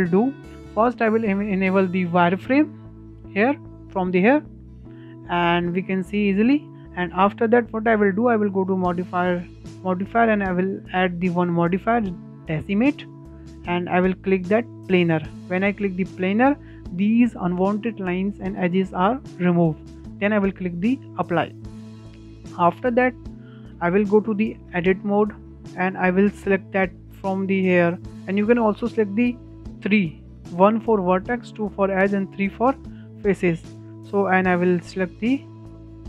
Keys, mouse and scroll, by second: 0.3 Tab, 2.3-4.7 drag, 4.7-5.4 shift+middle drag, 5.4 click, 6.7 click, 8.7-11.7 drag, 15.0 click, 21.2 click, 22.0-22.6 shift+middle drag, 22.6-22.9 scroll down 2, 22.9 shift+middle click, 23.3 scroll up 1, 23.6-24.7 shift+middle drag, 24.7 Tab, 25.9-28.8 shift+middle drag, 29.8 3, 30.6 1, 31.6 2, 32.4 3, 34.1-35.1 shift+middle drag, 35.1 click.